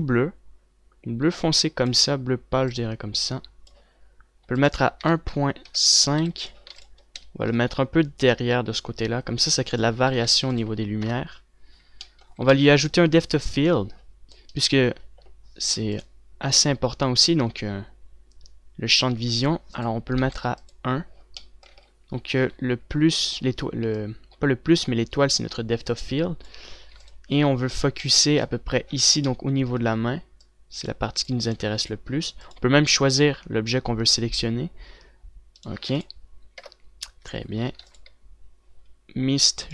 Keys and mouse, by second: 7.4 ctrl+s, 8.2 g, 10.5-11.0 a, 11.0 ctrl+s, 11.6 KP_0, 12.4 z, 12.9 z, 13.3 ctrl+s, 20.6-22.3 drag, 24.8-26.3 drag, 27.8 ctrl+s, 31.3-33.8 drag, 32.7 ctrl+s, 36.9 ctrl+s, 37.4 KP_0, 38.2 a, 38.5 ctrl+s, 38.5 a.